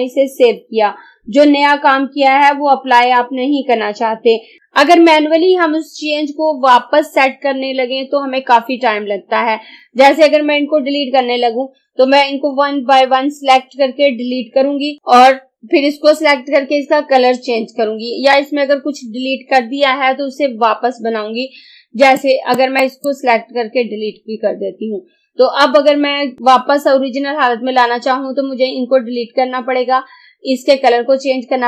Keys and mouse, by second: 22.3 click, 24.0 Delete.